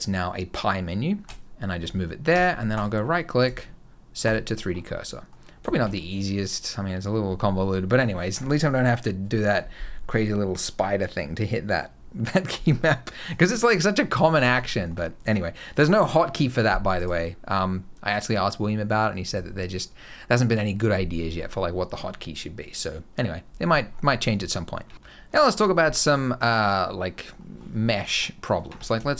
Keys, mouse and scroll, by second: 1.6 scroll up 2, 2.2 Tab, 2.6 right click, 4.4 scroll down 4, 4.8 middle click, 5.2 scroll up 1, 5.5 shift+middle click, 14.5 shift+middle click, 16.8 right click, 23.6-24.0 scroll down 1, 24.0 scroll up 1, 24.4 shift+middle click, 24.7 shift+scroll down 2, 26.6-27.2 scroll up 4, 27.2 middle click, 27.7 shift+middle click, 27.9 scroll up 1, 28.1 middle click, 28.5 Tab, 28.9 shift+middle click, 29.1 scroll up 1.